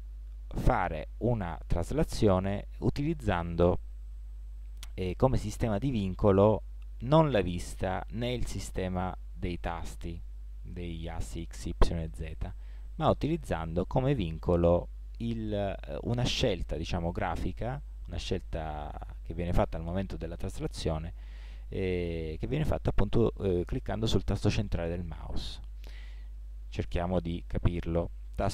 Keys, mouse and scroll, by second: 10.2-11.5 middle drag, 11.5-13.9 drag, 13.9-25.4 middle drag, 25.4-26.4 drag, 26.4 middle click.